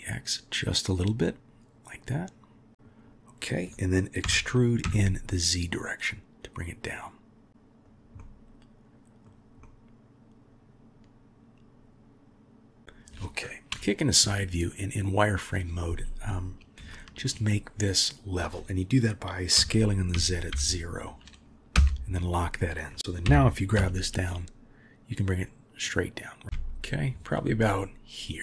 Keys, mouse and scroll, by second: 2.7 middle click, 8.2-9.2 middle drag, 9.6-12.8 middle drag, 13.7 KP_3, 15.3 click, 23.2 g.